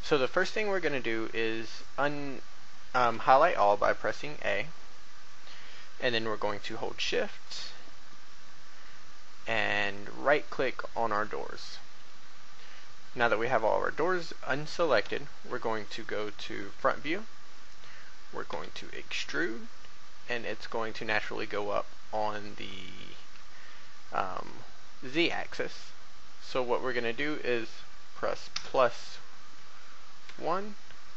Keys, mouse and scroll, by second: 0.2-0.6 scroll up 1, 2.9 a, 7.3 shift+right click, 9.9 shift+right click, 12.8-15.0 scroll down 1, 15.0 1, 16.9 1, 18.5 e, 30.2 KP_1.